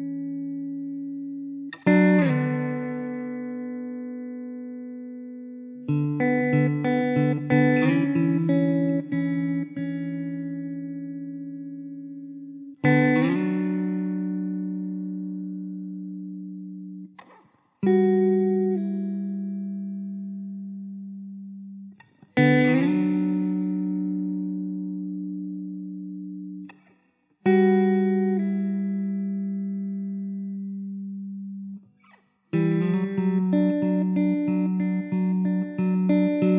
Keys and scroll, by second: 7.5 Tab, 8.0 Tab, 15.0 ctrl+j, 23.2 shift+d, 24.9 Delete, 25.3 s, 25.6 `, 26.8 shift+d, 28.4 KP_0, 32.5 KP_0, 33.5 ctrl+s.